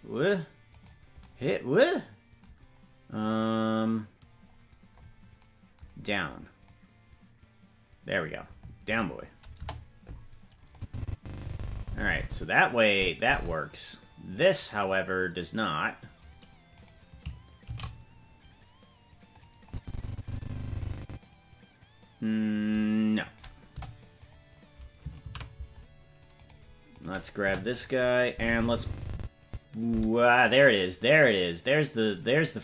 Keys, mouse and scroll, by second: 0.8 right click, 4.2-4.9 scroll down 4, 4.9-6.2 scroll up 4, 6.6-8.2 drag, 9.5 KP_0, 10.7-13.7 drag, 14.7 right click, 16.7 right click, 17.6 shift+d, 19.6-22.5 drag, 23.2 right click, 23.7 Delete, 25.6 ctrl+z, 26.3-27.4 right drag, 27.4 Delete, 28.3-30.1 drag.